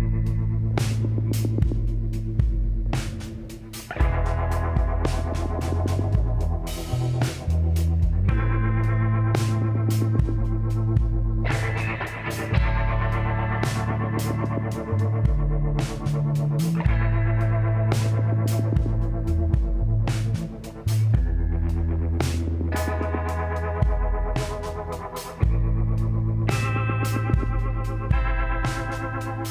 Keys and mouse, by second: 1.0 middle click, 2.0-3.8 drag, 4.2-6.3 drag, 6.3-9.1 middle drag, 9.8-11.4 drag, 10.3 middle click, 11.0 KP_1, 12.1 z, 13.1 z, 14.6 KP_3, 15.9 shift+d, 18.2 click, 19.6 r, 21.2-22.7 drag, 22.7 KP_1, 23.4 z, 26.4 e, 28.6-29.5 drag.